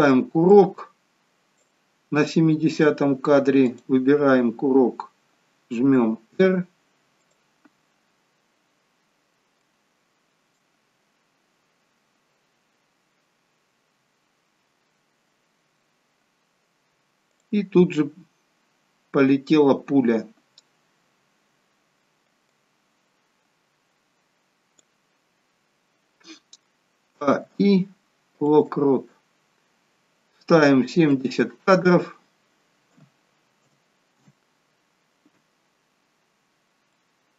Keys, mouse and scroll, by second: 0.5 click, 3.6 click, 5.8 r, 8.7-9.2 scroll down 2, 9.5 shift+middle click, 10.7-12.0 scroll down 1, 14.0 scroll down 3, 17.3 click, 19.0-20.2 scroll down 5, 21.5-22.5 scroll down 2, 22.5 click, 31.0 click, 36.8 middle click, 36.8 scroll up 6.